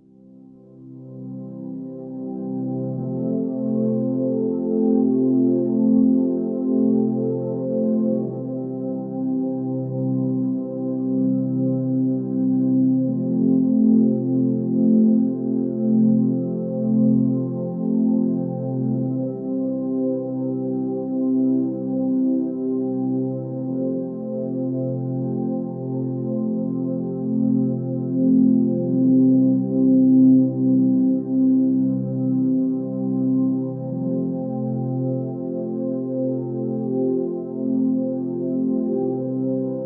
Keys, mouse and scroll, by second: 7.3 ctrl+space, 9.0 ctrl+z, 15.5 ctrl+z, 15.9 ctrl+space, 29.9 ctrl+z, 31.2 ctrl+z, 35.1 ctrl+space, 36.1 ctrl+space.